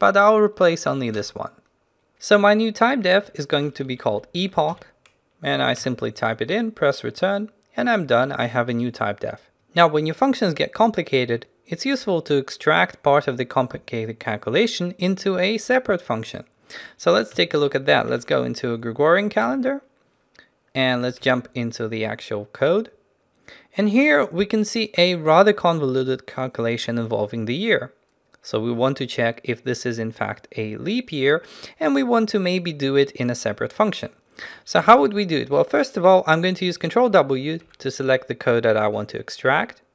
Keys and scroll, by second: 17.4 ctrl+n, 37.1 ctrl+w.